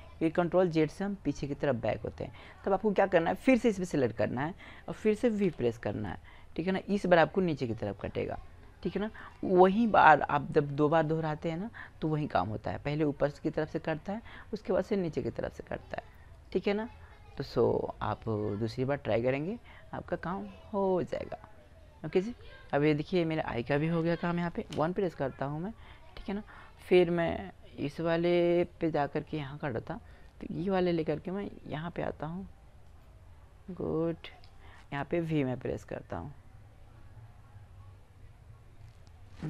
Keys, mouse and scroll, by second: 0.2 ctrl+z, 2.2-4.9 right drag, 5.2 v, 9.0-13.6 drag, 11.8-13.0 right drag, 17.0-19.1 right drag, 18.1-19.9 drag, 19.9-22.0 middle drag, 23.4 middle click, 24.5 KP_1, 33.6 right click.